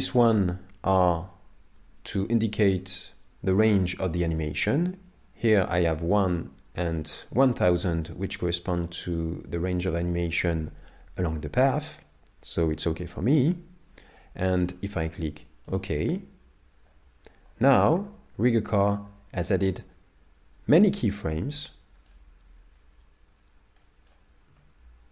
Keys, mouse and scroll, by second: 22.1 click, 24.5 z.